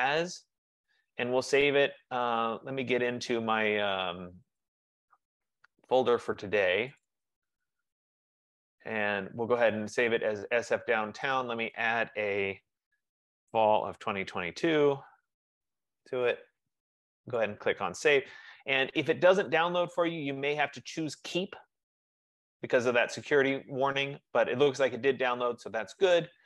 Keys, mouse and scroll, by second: 1.9 F15, 2.7 click, 4.7 click, 7.1 click, 7.4 click, 11.6 click, 12.0 click, 13.2-15.3 typing, 17.7 click, 19.8 click, 22.1 click.